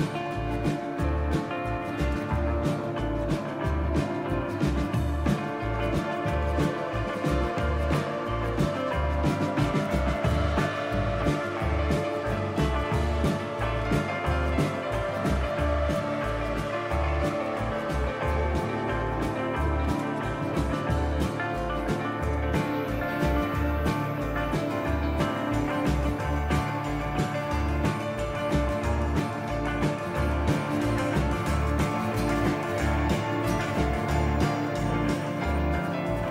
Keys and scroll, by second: 0.0-0.8 typing, 2.2 typing, 3.9 typing, 6.3 typing, 10.0 typing, 12.8-14.1 typing, 19.6-21.1 typing, 21.4 Tab, 22.2 Return, 22.7-23.4 typing, 23.5 Return, 27.6 typing, 31.5-33.5 typing, 34.9 typing, 36.0-36.3 typing.